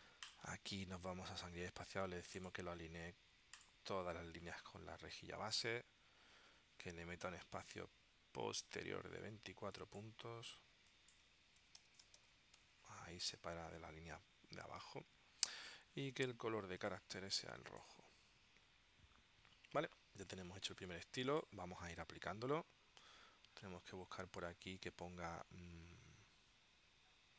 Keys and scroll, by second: 11.5-12.8 typing.